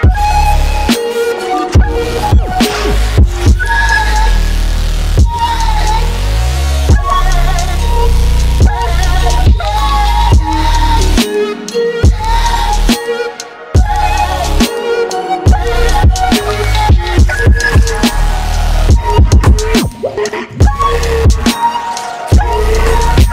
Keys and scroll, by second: 22.6 ctrl+c.